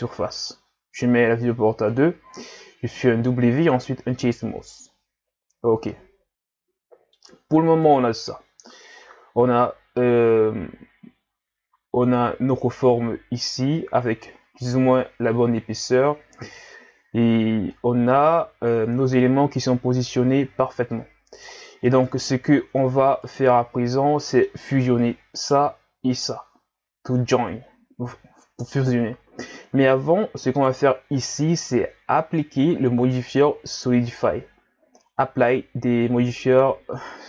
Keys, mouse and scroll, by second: 1.9-3.1 drag, 3.1 w, 4.7-5.6 scroll down 1, 5.9-7.8 middle drag, 7.8 KP_1, 9.0-9.5 scroll up 4, 17.7-18.6 middle drag, 18.6 scroll up 1, 18.8 Tab, 21.5-21.9 scroll down 4, 21.9 middle click, 22.6 Tab, 23.3 right click, 24.2-25.4 middle drag, 25.4 right click, 26.2 shift+right click, 30.5 right click, 33.3-36.3 drag, 36.5-37.2 drag.